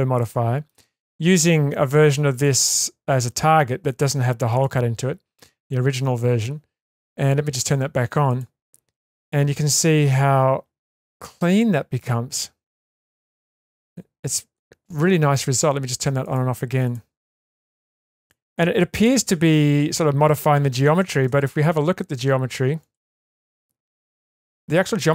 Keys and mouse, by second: 0.2 shift+middle click, 2.3 click, 4.5 click, 8.8 click, 10.9 middle click, 11.5-11.9 shift+middle drag, 12.7-14.5 middle drag, 16.2 click, 17.3 click, 18.2 click, 19.4 click, 22.8 click, 23.8 click, 24.2 click.